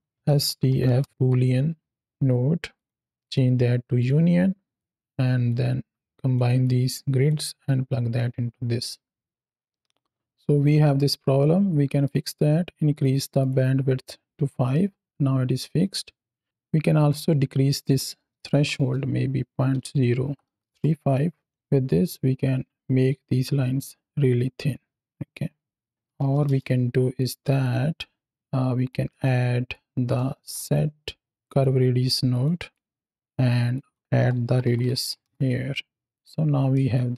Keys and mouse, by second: 1.1 o, 2.6 click, 3.1-3.9 drag, 4.6 drag, 5.3-6.2 ctrl+drag, 6.5 click, 7.5-8.1 drag, 9.2 middle click, 11.2-11.9 middle drag, 12.8 click, 13.3 click, 14.6-15.8 middle drag, 16.8-20.6 drag, 21.7-26.3 drag, 27.0 drag, 27.5 click, 28.3 click, 28.9 middle click, 29.6 click, 30.3 shift+a, 32.2 click, 32.6 click, 33.6 click, 36.8-37.1 shift+drag.